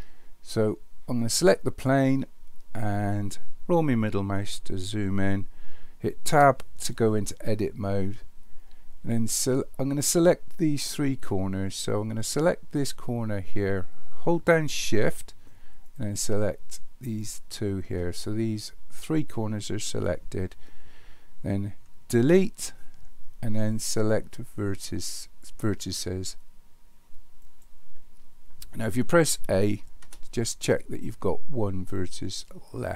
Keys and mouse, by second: 6.3 Tab, 12.8 click, 17.3 shift+click, 22.2 Delete, 30.0 a.